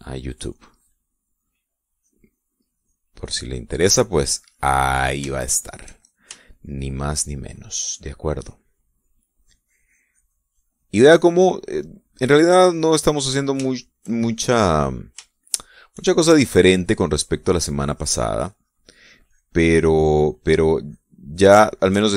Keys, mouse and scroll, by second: 1.2 middle click, 2.5-3.8 drag, 4.0 click, 4.4 click, 5.3 middle click, 6.0 shift+middle click, 6.6 shift+middle click, 7.1 shift+middle click, 7.6 shift+middle click, 8.2 shift+middle click, 10.0-12.1 drag, 12.2 middle click, 12.7-13.8 drag, 13.8 middle click, 14.4 shift+middle click, 16.2 shift+middle click, 18.0-22.1 drag.